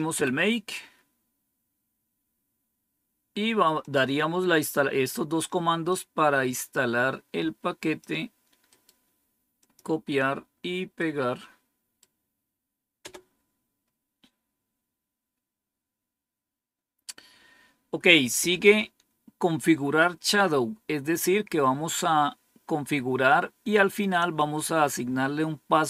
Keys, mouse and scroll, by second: 0.0 Down, 1.4-1.9 scroll down 3, 3.7 click, 5.8-7.9 drag, 8.6 right click, 9.5 click, 10.9 right click, 12.9 Return, 20.3-21.2 scroll down 3, 23.5-24.1 scroll down 3.